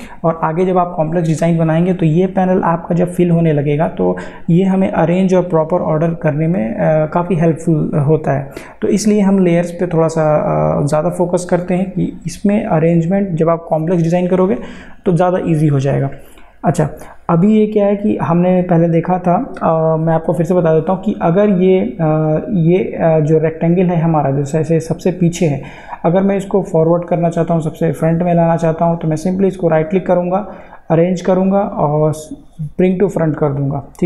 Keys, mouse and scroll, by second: 21.3 click, 29.3 right click, 33.5 click.